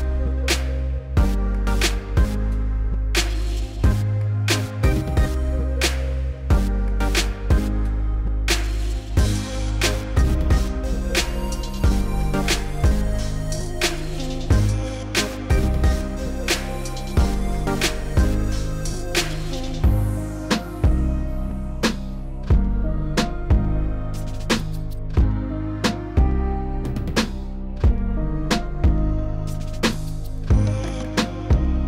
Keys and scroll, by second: 1.4 3, 2.5 s, 4.0 alt+e, 6.0 3, 22.3 s, 24.9 s, 30.0 s.